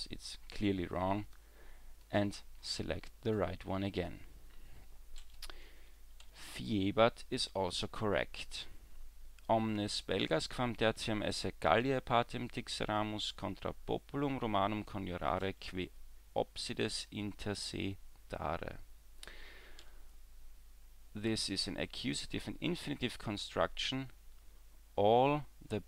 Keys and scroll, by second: 6.2 w, 19.8 w.